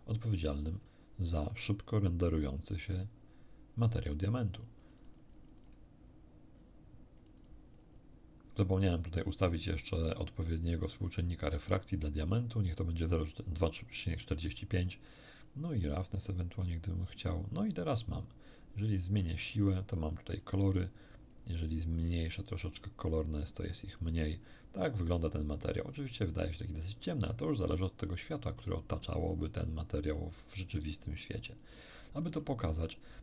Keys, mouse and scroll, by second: 4.6-5.8 drag, 7.2 click, 7.8 click, 10.5 click, 15.4-17.2 drag, 18.1-20.6 drag, 21.3-24.2 drag, 24.4 click, 25.2 click, 25.9 click, 26.8 click, 28.2-30.4 middle drag, 31.2 click, 32.6 middle click.